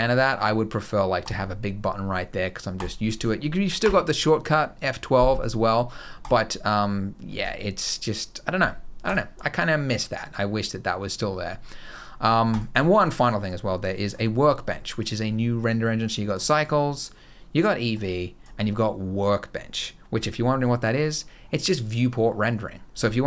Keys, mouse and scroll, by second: 2.5 click, 3.7 F12, 8.8 click, 12.3 click, 13.2 click, 14.7 click, 16.4 click, 17.7 click, 21.0-21.4 scroll down 1, 21.4-22.0 scroll up 1, 22.0-22.4 scroll down 4, 23.0 KP_0.